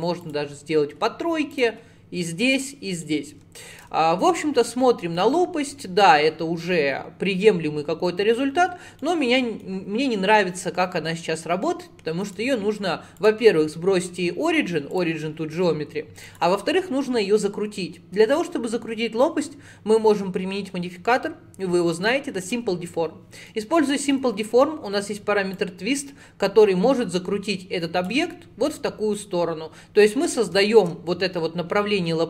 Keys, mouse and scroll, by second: 2.6 click, 3.1-6.1 middle drag, 9.0 middle click, 9.9 scroll up 2, 12.3-16.3 right drag, 16.3-19.5 drag, 23.5-25.6 middle drag, 25.6-28.3 drag, 28.3-30.1 middle drag, 30.1 click, 30.6-32.2 shift+middle drag.